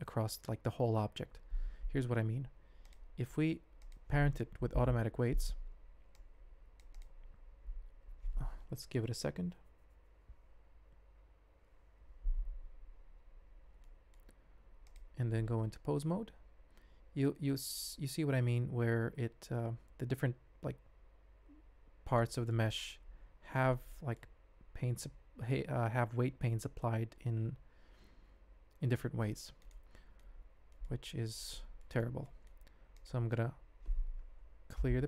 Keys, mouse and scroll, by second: 2.8 click, 3.8 shift+click, 4.7 ctrl+p, 13.8-14.1 drag, 14.4 ctrl+Tab, 16.0 r, 22.3 drag, 23.9 click, 24.7 r, 29.9 drag, 30.7 click, 31.1 ctrl+Tab, 31.8 shift+drag, 32.2 middle click, 32.9 click, 34.7 alt+p.